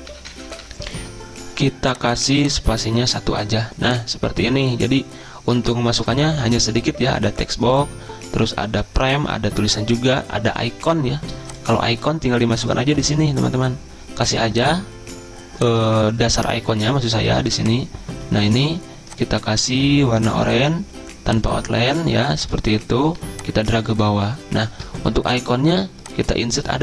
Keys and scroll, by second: 0.2 ctrl+[.